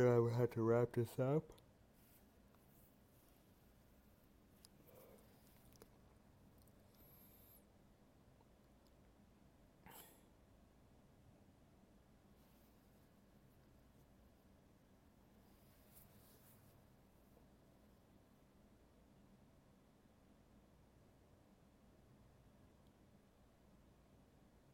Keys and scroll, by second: 4.0 alt+space, 8.0 alt+space, 12.2 ctrl+z, 12.4 alt+space, 14.8 alt+space, 15.5 ctrl+z, 19.3 alt+space.